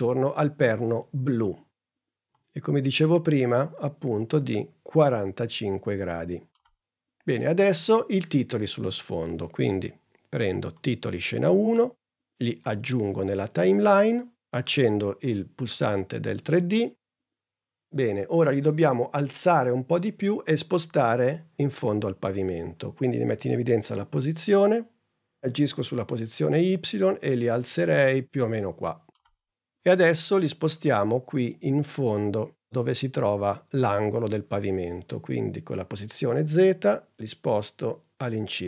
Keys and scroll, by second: 23.5 p.